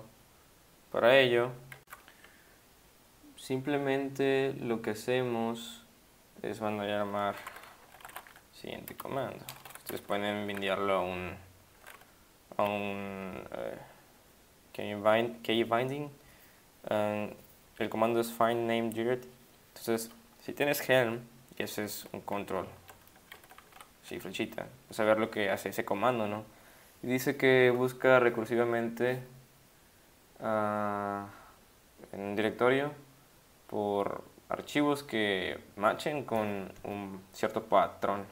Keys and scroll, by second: 23.7 ctrl+Down.